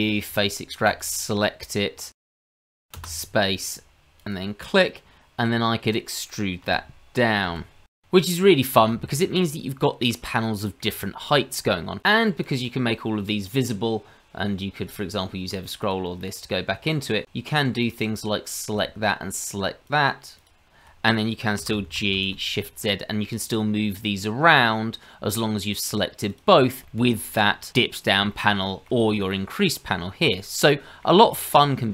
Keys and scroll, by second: 21.5 g.